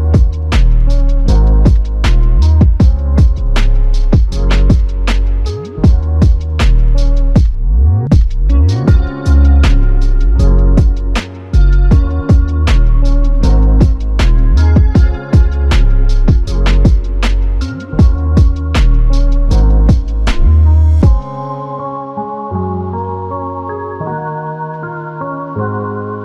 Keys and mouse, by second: 4.5 typing, 6.9 alt+click, 10.6 double click, 15.1 double click, 20.7 double click, 23.3 alt+click.